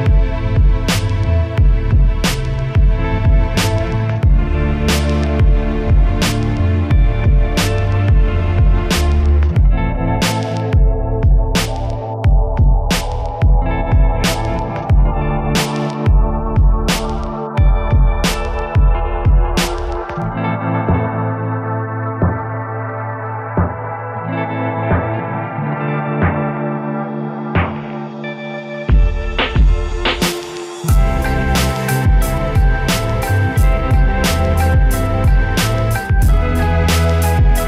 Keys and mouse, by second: 0.6 Tab, 0.9 ctrl+r, 1.4 a, 1.4 z, 1.6 v, 1.9 x, 2.1 click, 2.8-4.1 drag, 4.1-6.3 typing, 5.2 click, 5.3 right click, 5.5 click, 5.5 middle click, 6.0 click, 7.4 click, 8.0 r, 8.6 click, 9.4-10.3 typing, 10.8 click, 11.4 ctrl+r, 12.6 s, 12.6 click, 12.7 KP_1, 12.9 z, 14.2 KP_1, 14.5 a, 14.6 a, 14.6 space, 15.7 right click, 15.9 KP_1, 18.1 a, 18.3 z, 18.4 b, 19.4 KP_7, 19.6 z, 20.6 s, 20.9-23.2 drag, 22.9 right click, 23.3 x, 23.7-24.9 right drag, 23.8 x, 25.6 click, 25.9 right drag, 26.1 KP_7, 26.5 s, 26.9 click, 27.6 s, 28.1 click, 28.5 right click, 28.7 click, 29.1-29.8 right drag, 29.3 drag, 29.9-30.2 right drag, 30.0 s, 30.3 click, 30.9 e, 31.1 click, 31.5 KP_1, 32.4 click, 33.2 right click, 33.7 a, 33.8 right click, 34.6 e, 34.7 KP_1, 34.9 click, 35.8 r, 36.2-36.8 drag, 36.8 a, 36.8 z, 36.9 b, 37.1 right click.